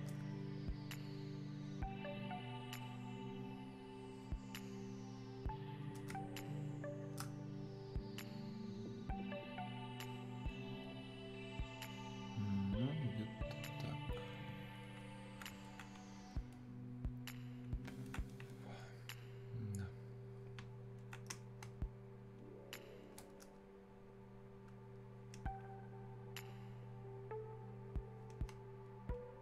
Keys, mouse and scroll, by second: 0.2-6.5 drag, 6.5-16.2 shift+drag, 16.2 right click, 16.6-21.7 drag, 21.7 space, 28.5 space, 29.2 click, 29.3 space.